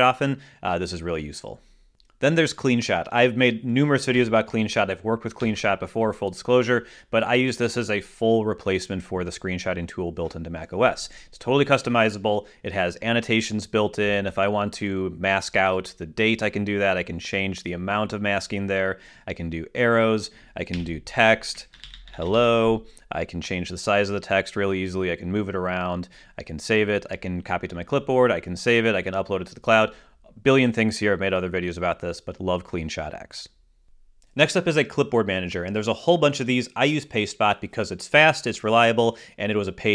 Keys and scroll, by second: 6.3 shift+super+4, 22.2-23.7 typing.